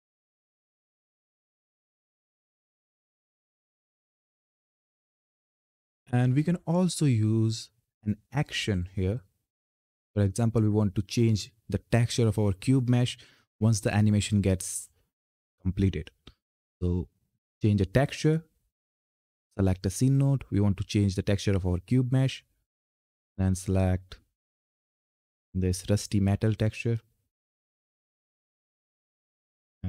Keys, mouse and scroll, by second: 0.6 f, 3.2 f, 5.8 click, 16.9-24.6 drag, 29.6 ctrl+F10.